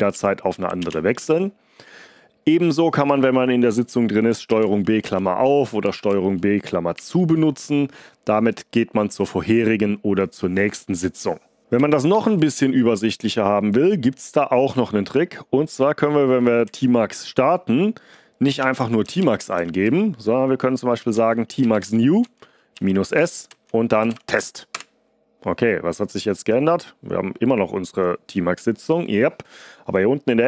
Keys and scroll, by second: 0.0 s, 0.4 Up, 0.7 Return, 4.4 ctrl+b, 4.9 (, 5.9 ctrl+b, 6.9 ), 11.7 ctrl+c, 12.1 ctrl+d, 18.5 ctrl+l, 18.7-24.8 typing.